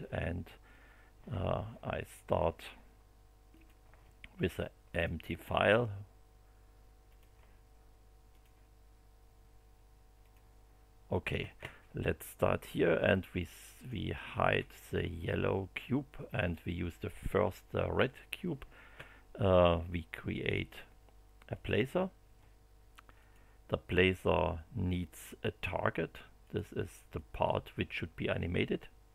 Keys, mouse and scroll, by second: 3.5 click, 4.9 click, 7.1 click, 8.3 click, 10.2 click, 13.7 click, 14.3 space, 16.3 click, 21.5 click, 23.1 click, 26.4 click, 27.1 click.